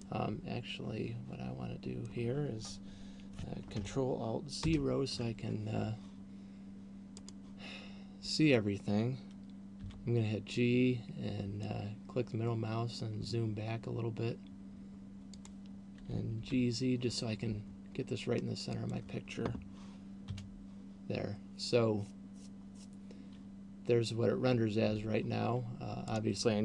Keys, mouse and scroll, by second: 4.8 ctrl+alt+KP_0, 7.5 right click, 10.3 g, 15.5 click, 16.3 g, 19.3 click, 25.0 Escape, 26.3 right click.